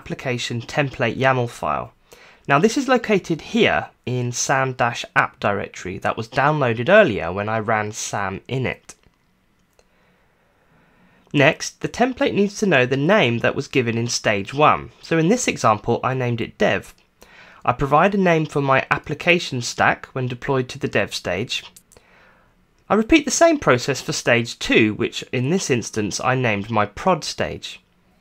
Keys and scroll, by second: 0.6-3.9 typing, 12.0 Return, 14.7-15.7 typing, 16.7-21.0 typing, 21.9 Return, 22.5-27.5 typing, 28.0 Return.